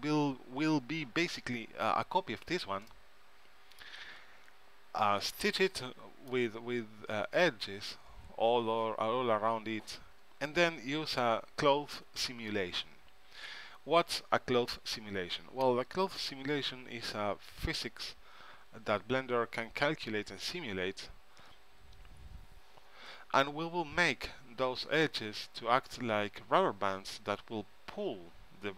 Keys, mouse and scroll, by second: 3.0-4.9 middle drag, 5.9-7.7 middle drag.